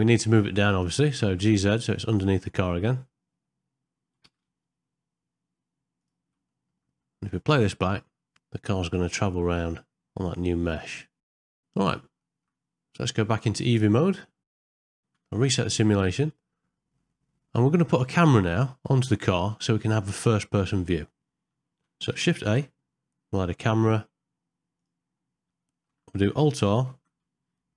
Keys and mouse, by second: 0.0 middle click, 1.1 g, 6.5 ctrl+middle click, 7.0 middle click, 8.4 space, 8.9 click, 9.0 g, 12.2 ctrl+space, 12.3 ctrl+middle click, 14.2 middle click, 14.8 ctrl+middle click, 14.9 shift+middle click, 15.3 shift+Left, 17.1 middle click, 18.2 middle click, 21.1 middle click, 22.4 shift+a, 25.5 middle click, 26.9 alt+r.